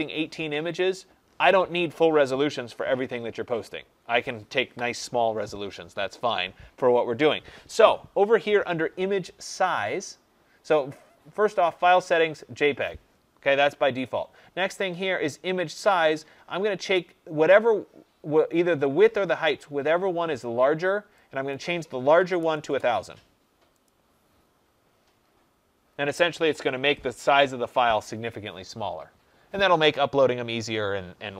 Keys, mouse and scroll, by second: 21.4 click, 21.8-22.8 typing, 23.7 click.